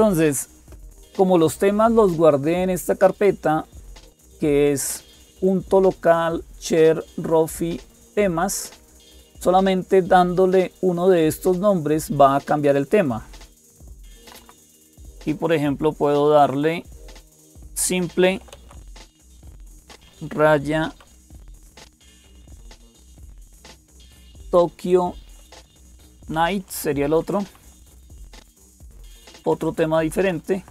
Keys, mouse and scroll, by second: 0.0-30.7 typing, 12.3 click, 13.6 Left, 14.0 Left, 14.2 Left, 14.4 Left, 14.5 Left, 26.7 Delete, 26.9 Delete, 27.1 Delete, 27.2 Delete, 29.1 Delete, 29.1 Left, 29.3 Left, 29.5 Left, 29.6 Left.